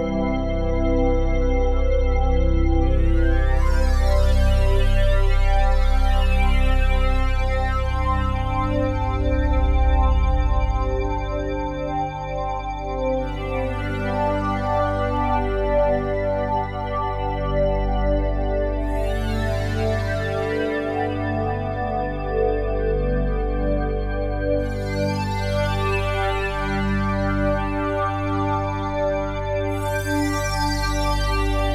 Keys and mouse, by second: 0.3 click, 1.5 click, 2.7 click, 4.3 click, 5.0 click, 5.5 click, 8.3 click, 9.0 click, 9.2 click, 9.8 click, 12.9 click, 14.8 click, 15.1 click, 16.9 click, 17.2 click, 17.9 click, 19.1 click, 19.9 click, 21.1 click, 22.5 click, 24.9 click, 25.8 click, 27.2 click, 27.8 click, 28.9 click, 31.4 click.